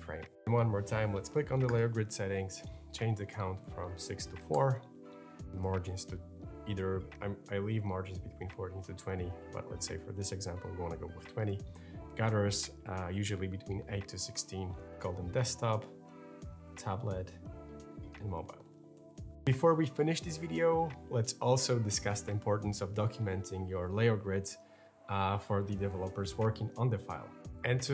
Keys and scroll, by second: 4.2 4, 4.3 Return, 9.1 2, 9.4 0, 9.6 Return, 14.3 8, 16.1-19.0 typing.